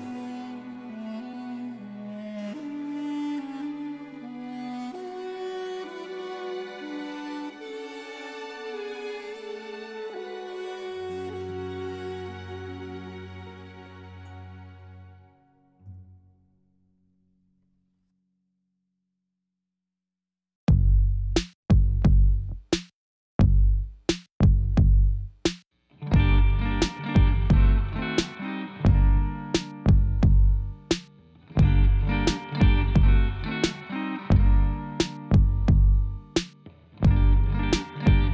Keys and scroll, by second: 4.9-6.3 typing, 6.9 Return, 17.4 shift+d, 20.5 g, 20.7 y, 33.5 ctrl+z, 35.1 shift+z, 36.5 shift+z.